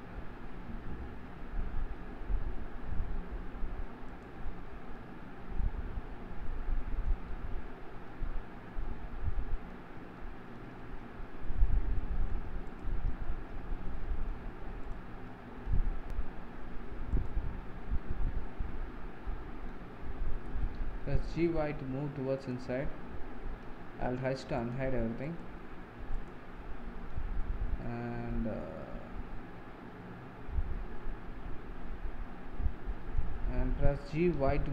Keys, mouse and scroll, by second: 4.6 scroll up 2, 5.0-12.8 middle drag, 13.2-14.9 middle drag, 14.9 click, 15.3-16.8 middle drag, 16.8 h, 17.3 click, 18.2-19.8 middle drag, 20.6 g, 24.0 alt+h, 24.8 click, 25.5 click, 26.3 click, 26.7 middle click, 27.9-33.3 middle drag, 28.7 scroll up 2, 34.2 g.